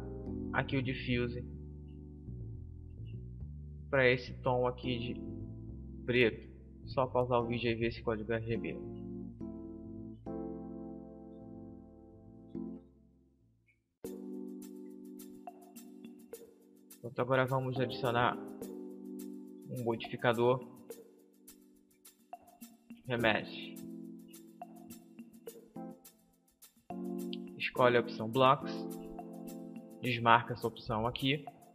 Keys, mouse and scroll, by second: 5.9-7.9 drag, 11.9-13.8 right drag, 16.5-18.4 drag, 18.6-22.4 drag, 26.6-28.5 drag, 30.3-31.7 drag.